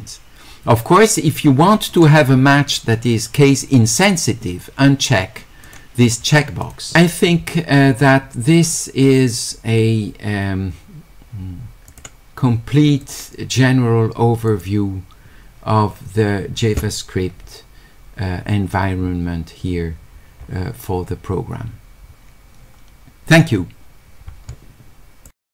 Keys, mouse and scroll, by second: 1.9 click, 5.7 click, 6.6 click, 11.9 click, 13.0 click, 14.5 click, 20.4 middle click, 25.3 click.